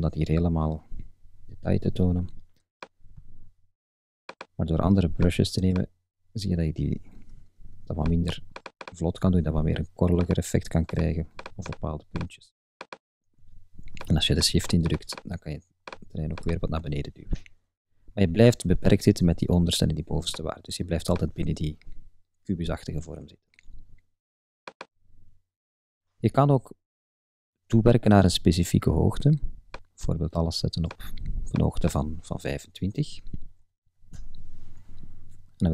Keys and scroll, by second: 33.3-34.3 typing.